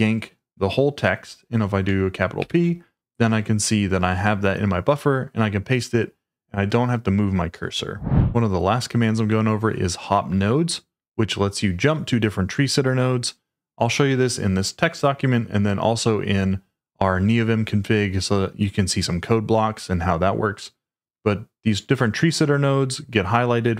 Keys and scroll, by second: 2.4 shift+p.